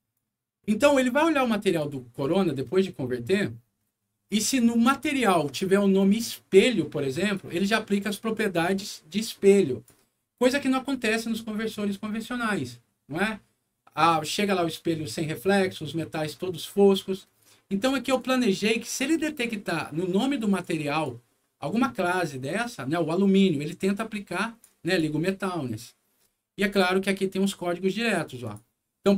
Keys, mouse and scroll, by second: 1.0 click, 2.1 click, 3.4 scroll down 2, 4.0 scroll up 2, 6.1-7.3 drag, 8.3-9.8 drag, 18.1 click, 18.9-20.5 drag, 20.9 click, 23.9 click, 24.8 click, 26.1-26.6 scroll up 4, 27.4 click, 28.4 click.